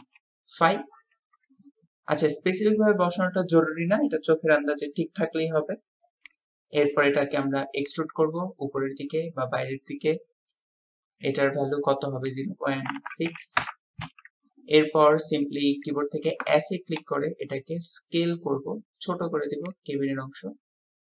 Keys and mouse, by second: 7.8-10.7 drag, 12.2-13.6 drag, 15.4-16.1 drag, 20.2-21.1 drag.